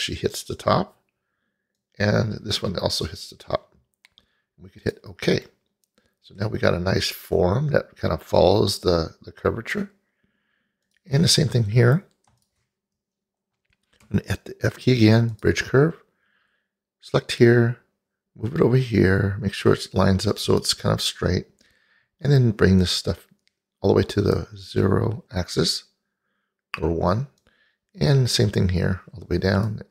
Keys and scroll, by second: 14.1 f.